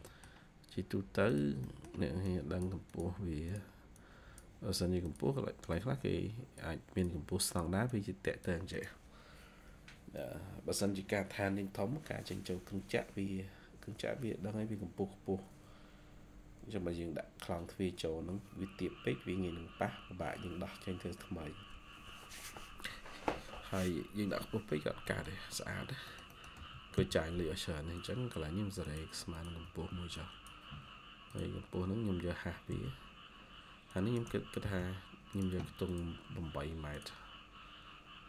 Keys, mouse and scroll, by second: 0.4-1.5 scroll up 1, 1.5 middle click, 3.8 double click, 7.8 double click, 24.9 middle click, 25.5-26.0 scroll down 1, 26.0 middle click, 26.5-28.2 typing, 27.3-27.7 scroll up 1, 29.5 Escape, 29.8 Escape, 32.6 typing, 34.6 typing.